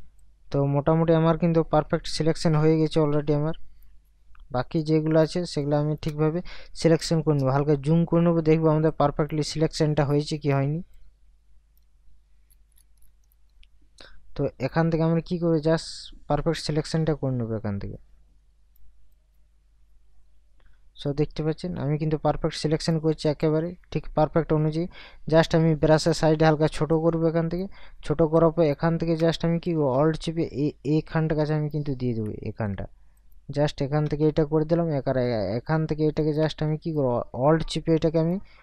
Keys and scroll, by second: 6.8 ctrl+KP_Add.